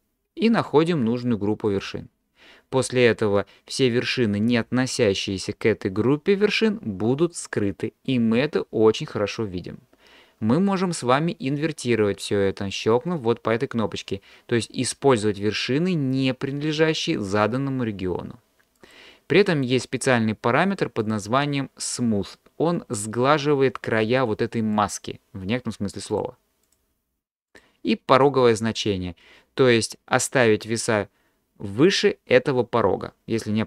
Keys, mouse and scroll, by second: 8.1-10.7 middle drag, 17.4 click, 18.8 click, 19.5 click, 21.0 click, 24.8 click, 26.1 click, 26.7 click, 27.5 click.